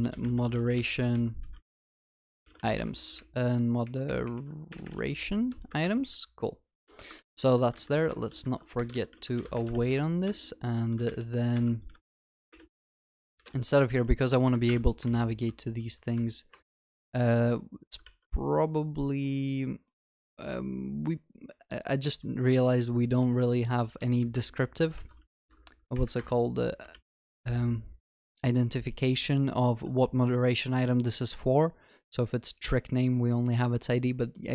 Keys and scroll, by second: 6.9 ctrl+alt+shift+l, 7.2 ctrl+s, 14.7 Return, 18.1 ctrl+s, 26.2 Return, 27.0 ctrl+s.